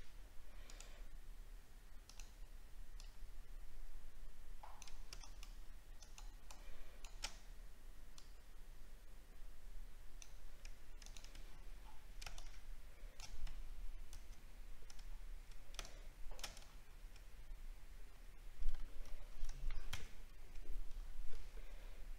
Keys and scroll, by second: 11.4-11.8 alt+scroll down 1, 15.0 alt+scroll down 2, 16.6 alt+scroll up 4, 21.3 ctrl+alt+z.